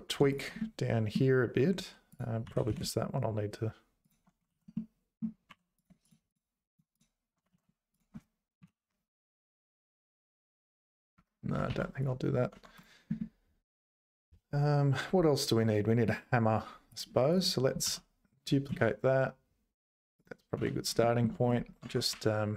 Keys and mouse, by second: 0.3 shift+click, 0.6 middle click, 2.5 g, 4.5 ctrl+z, 5.5 3, 5.8 click, 6.1 shift+click, 6.3 shift+click, 6.7 shift+click, 6.9 shift+click, 7.5 ctrl+z, 8.6 i, 11.7 ctrl+s, 12.0 click, 12.5 Tab, 13.2-16.1 middle drag, 16.9 click, 17.3 click, 17.8 shift+d, 21.2 click, 21.8 Tab, 22.1 1.